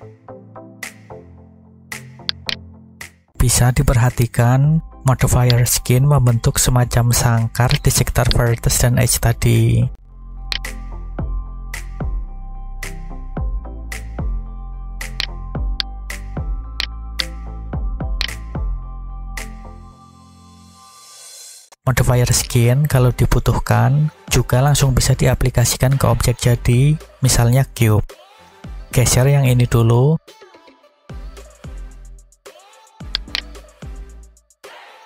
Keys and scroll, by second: 13.0 a, 30.4 g, 31.7 y.